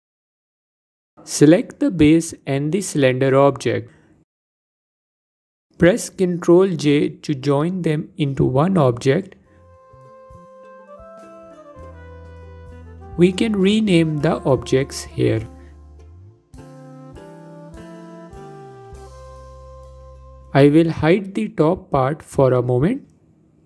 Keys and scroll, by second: 7.7 ctrl+j, 14.0 ctrl+z.